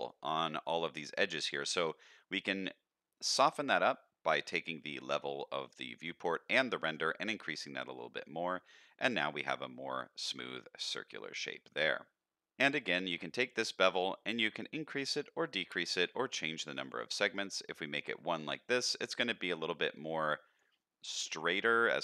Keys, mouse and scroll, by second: 0.6 middle click, 5.9 click, 6.8 click, 7.4 middle click, 7.8-8.2 scroll down 2, 8.2 middle drag, 9.0 scroll up 1, 9.3 middle click, 10.3 middle drag, 11.1 middle drag, 11.8-12.3 middle drag, 12.8 click, 13.7-16.0 shift+drag, 16.5 click, 16.9 click, 17.2 click, 18.4-20.6 shift+drag, 21.4 middle click.